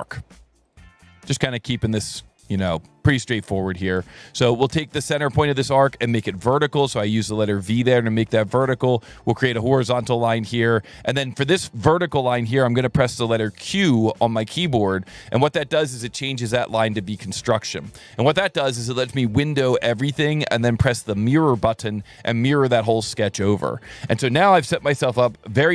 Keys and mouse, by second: 0.7 click, 1.7 click, 3.1 click, 3.6 Escape, 4.8 click, 5.5 click, 6.5 v, 7.2 s, 8.0 click, 8.8 click, 9.9 click, 13.9 q, 15.4 click, 16.0 Escape, 17.1 click, 21.1 click, 22.5 s, 23.4 click.